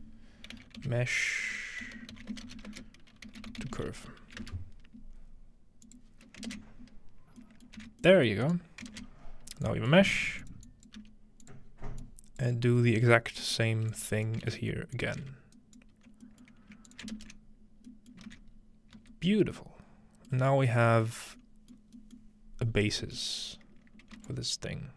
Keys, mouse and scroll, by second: 0.0-3.7 typing, 5.9 click, 6.5 ctrl+space, 7.4-9.1 middle drag, 7.8 alt+a, 8.9 ctrl+space, 9.7-11.7 drag, 10.1-11.0 typing, 11.7-13.7 scroll down 1, 11.8-13.7 drag, 13.7 scroll up 1, 13.9 click, 14.5 shift+d, 15.1-15.5 scroll up 1, 16.9 alt+shift+click, 17.1 ctrl+space, 18.3 alt+a, 18.6-19.6 scroll up 1, 19.0 z, 20.4-21.2 scroll down 1, 21.2-22.8 scroll up 5, 22.8-23.2 scroll down 2, 24.3-24.9 ctrl+shift+drag.